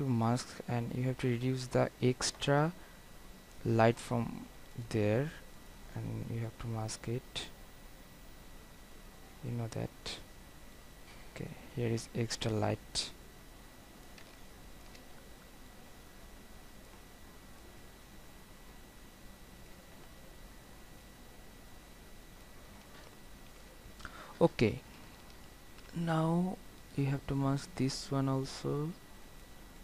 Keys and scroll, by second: 23.6 ctrl+0.